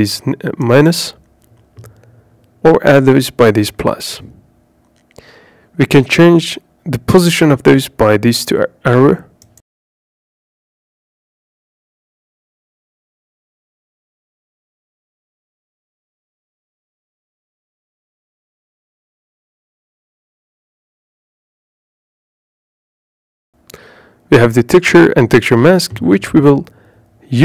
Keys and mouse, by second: 5.4 click, 6.3 click, 8.0 click, 9.3 click, 10.3 click, 10.6 click, 11.5 click, 12.8 click, 15.9 click, 20.8 middle click, 24.0 click, 26.6 click, 27.3 click.